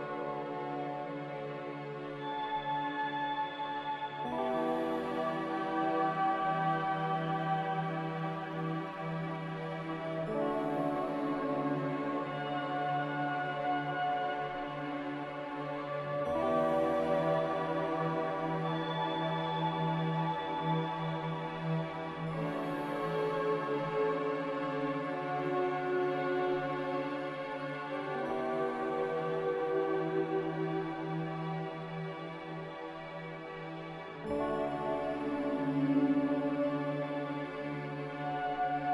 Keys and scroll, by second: 23.1 g, 28.0 m, 33.9 5.